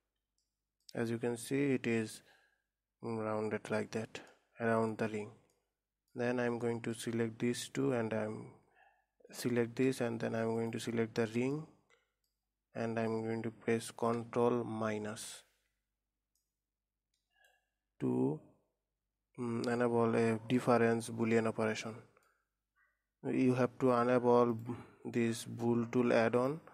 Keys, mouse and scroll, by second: 0.4-1.0 scroll up 3, 1.0 middle click, 1.6-2.0 scroll down 2, 4.7-7.5 middle drag, 7.5 scroll up 2, 11.0 shift+click, 12.1 middle click, 13.0-14.5 scroll down 2, 14.5-15.8 scroll down 1, 15.8 ctrl+KP_Subtract, 17.0-20.0 middle drag, 20.3-20.8 scroll up 1, 20.8-23.4 middle drag, 23.4-25.0 scroll down 2, 25.0-26.7 drag.